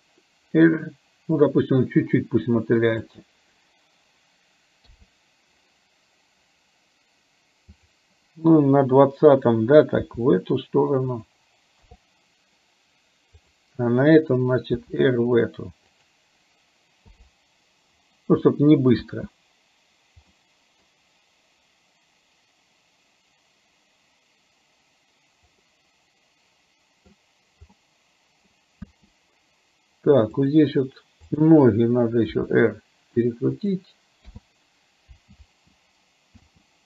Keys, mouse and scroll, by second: 4.9 i, 7.9 click, 10.2 r, 11.9 i, 14.8 r, 17.3 i, 18.5 middle click, 19.0 space, 20.4 middle click, 25.8-27.2 middle drag, 27.8 middle click, 28.9 space, 30.5 click, 32.4 r, 34.4 i, 35.4 space.